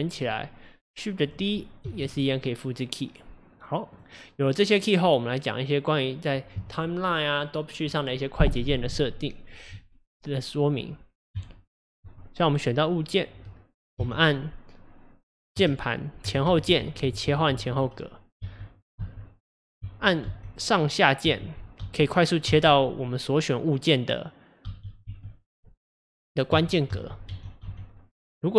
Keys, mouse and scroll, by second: 1.9 shift+d, 4.4-9.3 drag, 11.3 Left, 12.8 click, 14.0 Left, 15.6-16.5 Left, 16.7 Left, 17.1 Right, 17.3 Right, 17.5 Right, 17.7 Right, 19.0 Down, 21.3 Up, 21.8 Down, 22.5 Down, 25.1 Up, 26.5 Up, 26.9 Down, 27.3 Up, 27.7 Down.